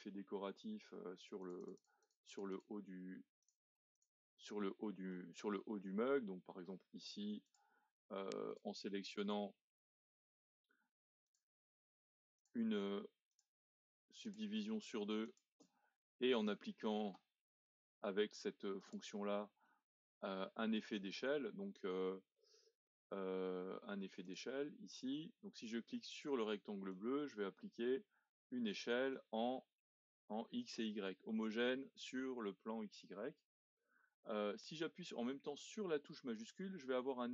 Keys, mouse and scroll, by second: 1.4-4.8 drag, 4.8-5.4 scroll up 2, 5.4-5.8 scroll down 1, 5.8-7.4 middle drag, 7.4-8.5 drag, 11.3 alt+click, 12.4 alt+shift+click, 13.3 alt+shift+click, 14.2 alt+shift+click, 15.2 alt+shift+click, 15.9-18.8 middle drag, 18.8 click, 19.6-22.7 middle drag, 24.2 click, 25.2-26.9 middle drag, 26.9 click.